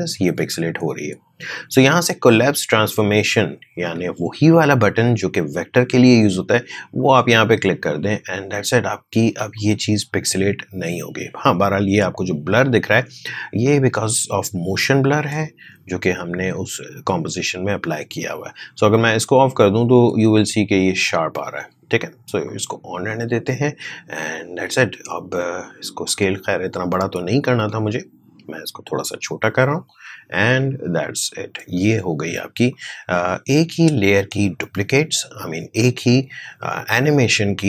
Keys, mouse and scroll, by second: 6.9-9.5 drag, 9.5-14.0 drag, 19.4 click, 22.4-37.6 drag.